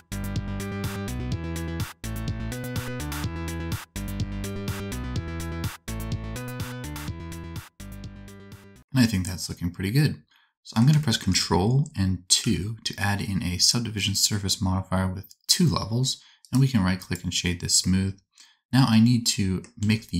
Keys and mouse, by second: 0.2 q, 0.3 s, 1.0 alt+z, 1.5 ctrl+z, 1.6-2.8 typing, 1.8 alt+a, 2.2 alt+a, 2.5 alt+a, 4.1 alt+a, 4.6 c, 5.0 s, 5.2 g, 6.2 alt+a, 6.3 c, 7.6 s, 8.4 Tab, 8.6 alt+click, 8.8 alt+z, 11.1 shift+click, 12.3 ctrl+2, 14.1 click, 16.4-20.1 drag, 19.7 Tab.